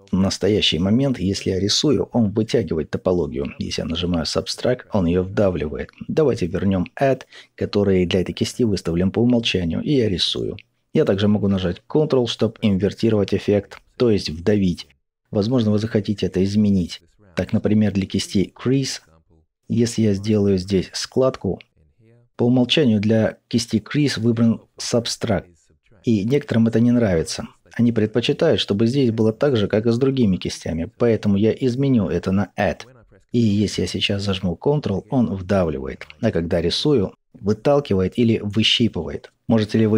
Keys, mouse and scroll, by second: 1.8-5.1 drag, 5.9-8.5 drag, 10.8-15.1 drag, 15.1-18.6 middle drag, 18.6 click, 20.9-31.2 drag, 32.2-38.4 drag, 38.4-39.9 middle drag.